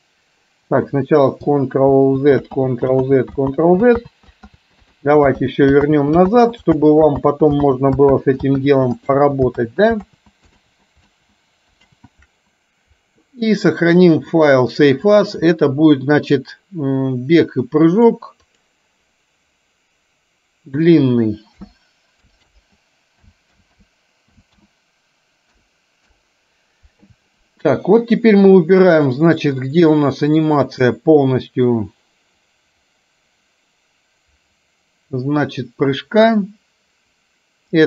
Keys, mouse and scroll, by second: 0.5 click, 2.0 ctrl+z, 4.1 ctrl+z, 4.7 ctrl+z, 5.0 ctrl+z, 6.3 ctrl+z, 7.2 ctrl+z, 11.2 ctrl+z, 14.1 ctrl+z, 29.5 click, 30.7 click, 32.6-37.8 drag.